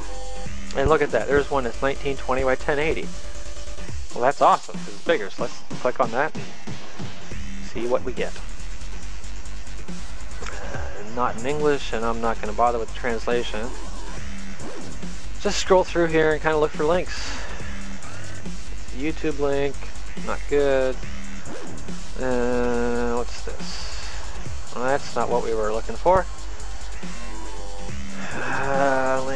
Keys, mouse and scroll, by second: 5.2 middle click, 7.2 click, 8.5 click, 13.5 click, 24.1 click.